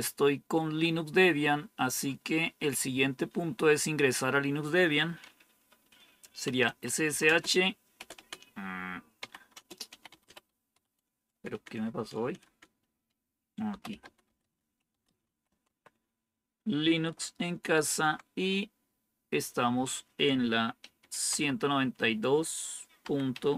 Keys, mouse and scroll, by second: 6.3-8.0 typing, 9.1-12.3 typing, 13.3-16.0 typing, 17.6 typing, 20.5-21.7 typing, 22.9-23.5 typing.